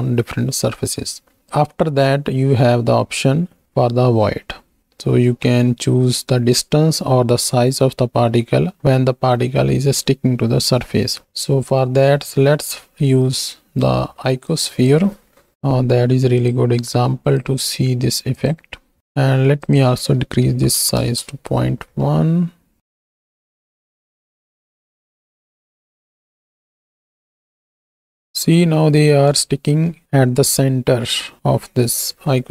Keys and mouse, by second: 11.2 alt+a, 11.7 drag, 12.4 click, 13.4 ctrl+click, 14.6 click, 16.3-18.4 drag, 19.7-21.0 drag, 22.1 middle click, 22.8 shift+Right, 22.8 shift+Left, 22.9 space, 23.7 space, 24.1 z, 24.8 shift+click, 25.5 space, 27.3 shift+click, 29.1 space.